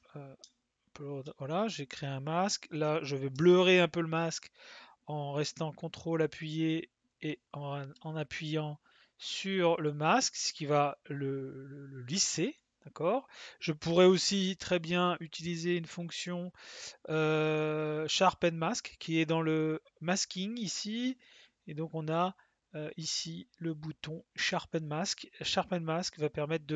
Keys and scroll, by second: 0.4 space.